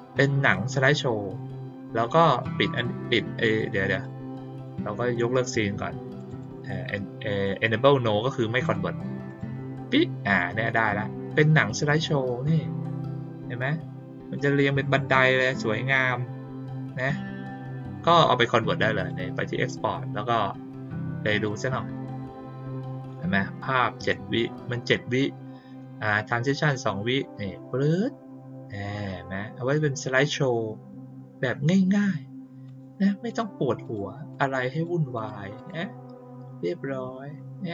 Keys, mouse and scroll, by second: 0.4 click, 2.3 click, 2.6 right click, 3.9 click, 4.5 click, 6.1 click, 6.3 click, 8.6 click, 9.2 click, 11.6 click, 11.8 click, 14.3-16.8 drag, 17.7 click, 18.9 click, 21.3 click, 32.6 click, 33.2 click, 33.8 click, 34.3 click, 34.7 click, 35.1 click, 35.5 click.